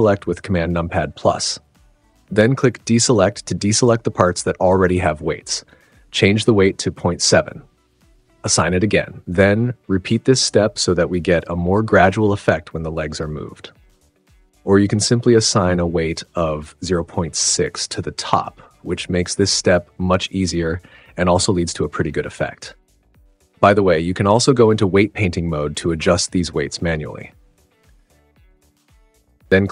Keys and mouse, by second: 0.5 click, 1.8 super+z, 3.0 super+=, 5.7 click, 6.8-8.3 drag, 8.3 super+=, 8.5 super+=, 9.8 click, 11.0 click, 11.9 click, 12.6 super+=, 12.8 super+=, 13.5-14.3 drag, 14.5 super+=, 14.9 super+=, 16.1 super+=, 16.3 super+=, 16.4 super+=, 16.5 super+=, 17.4 super+=, 17.6 super+=, 18.1 super+=, 20.4 click, 23.2 space, 23.4 click, 25.6 click, 28.0 super+z.